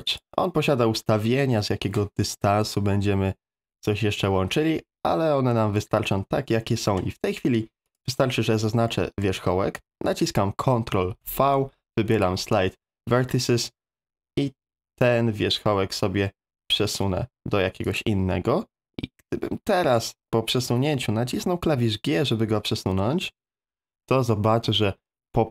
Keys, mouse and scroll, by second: 0.1 click, 7.9 click, 8.9 shift+middle click, 11.1 ctrl+v, 22.5 g.